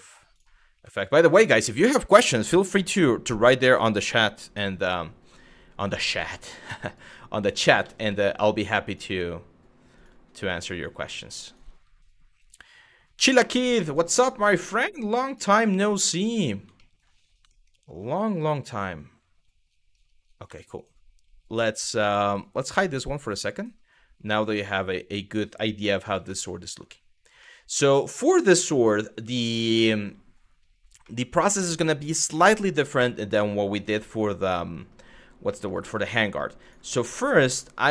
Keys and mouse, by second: 0.0 click, 0.6 ctrl+z, 1.1 click, 1.6 g, 5.4 click, 5.8 g, 7.1 click, 7.5 ctrl+z, 7.7 ctrl+z, 8.2 click, 8.7 g, 9.6 click, 10.3 click, 10.8 click, 11.3 g, 12.0 click, 13.6 click, 14.3 g, 16.4 middle click, 17.2 middle click, 17.9 click, 20.1 Tab, 20.4 click, 22.9 click, 24.3-25.2 middle drag, 26.0-26.4 middle drag, 27.2 middle click, 30.8-32.7 middle drag, 33.5 z, 35.2 middle click, 35.9 middle drag, 36.2 click, 37.1 Tab.